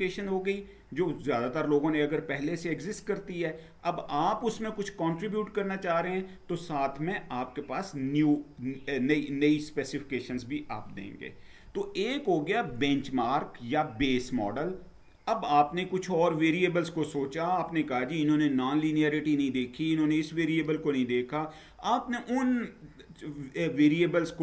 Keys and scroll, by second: 10.1 Down.